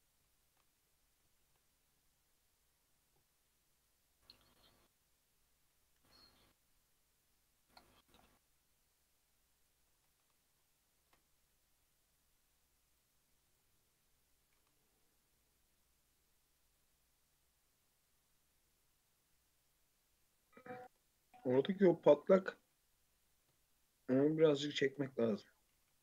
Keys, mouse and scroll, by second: 0.3 alt+shift+click, 1.4 shift+e, 6.0 ctrl+b, 10.1 alt+z, 10.5 scroll up 2, 11.0 ctrl+r, 14.6 alt+z, 15.1 scroll down 1, 15.3-17.7 middle drag, 17.7-18.3 scroll up 2, 18.3 Tab, 18.9 Tab, 19.2-21.0 middle drag, 21.0 Tab, 21.2 click, 21.5 Tab, 22.2 1, 22.6 alt+z, 23.2 click, 24.0 shift+click, 24.6 shift+click, 25.0 middle click, 25.3 alt+z, 25.7 g.